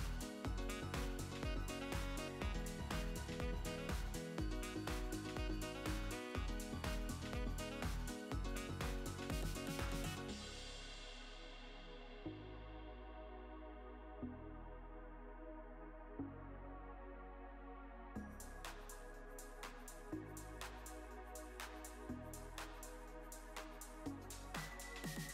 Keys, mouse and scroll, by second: 0.0 click, 0.6 s, 1.6 click, 2.1 s, 3.4-5.1 middle drag, 4.6 click, 5.4 s, 6.7-9.0 drag, 8.6 s, 9.9 click, 10.5 s, 11.7 click, 12.3 s, 12.5 KP_Decimal, 12.6 KP_0, 12.8 KP_5, 14.0 s, 15.3 click, 15.6 KP_1, 16.4-18.4 drag, 18.1 s, 21.6 click, 23.4 g, 24.2-25.2 middle drag.